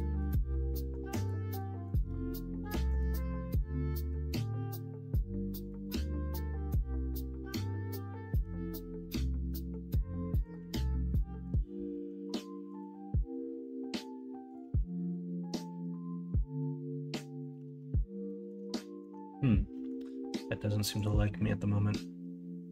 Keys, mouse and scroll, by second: 2.7-7.4 drag, 7.4 middle click, 8.3 g, 10.7 ctrl+z, 11.1 middle click, 11.9 middle click, 13.1-15.5 drag, 15.5 g, 17.6 ctrl+z, 18.2 middle click, 18.7 middle click, 19.7 middle click.